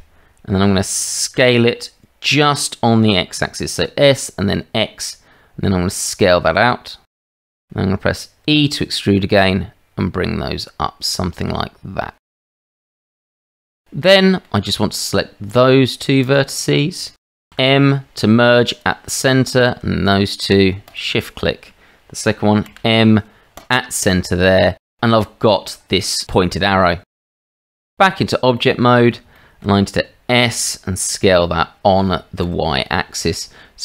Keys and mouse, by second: 1.4 s, 8.4 e, 12.7 shift+z, 12.9 shift+z, 13.8 middle click, 14.6 shift+click, 16.3 shift+click, 17.1 shift+click, 17.5 m, 20.8 shift+click, 22.7 m, 25.7 shift+middle click, 27.1 middle click, 27.3 Tab, 28.5-29.1 middle drag, 29.3 shift+middle drag, 30.4 s.